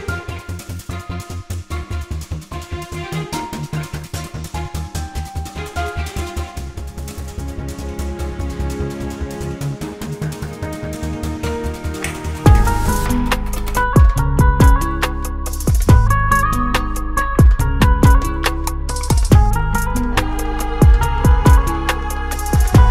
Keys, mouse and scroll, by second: 0.0 scroll up 1, 0.8 click, 1.6 ctrl+o, 2.9-3.5 scroll down 1, 4.5 click, 5.4 click, 10.2 click, 11.4 F4, 12.7 F9, 15.2 click, 16.7 click, 17.9-18.5 scroll down 1, 18.9 click, 20.4 click, 21.9 click, 22.7 click.